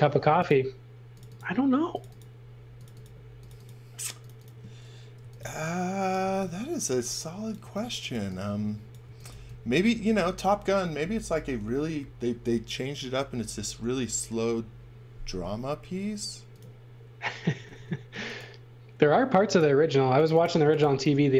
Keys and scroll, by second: 4.9-9.3 typing, 16.0 b, 17.5 space, 17.7 b, 20.4-21.3 typing.